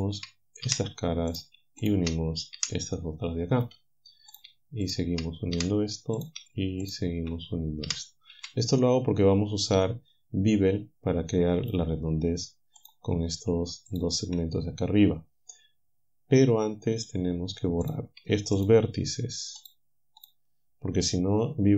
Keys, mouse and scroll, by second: 0.7 f, 1.9 shift+click, 2.9 click, 5.6 f, 6.9 shift+right click, 7.9 f, 8.8-10.1 drag, 11.7 click, 12.8 click, 13.9 shift+click, 17.0 click, 17.9 click, 18.6 shift+click, 19.6 shift+click, 20.3 shift+click.